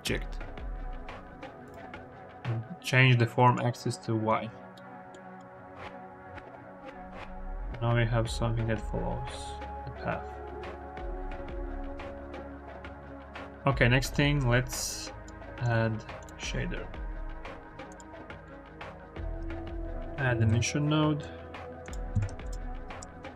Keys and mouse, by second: 1.5 middle click, 3.3 middle click, 4.6 middle click, 5.1 click, 5.5 click, 6.2 g, 6.5 y, 14.1 click, 15.5-16.1 drag, 17.3 n, 17.7 click, 18.3 click, 19.1 shift+a, 19.1 x, 22.0 click, 22.3 shift+a.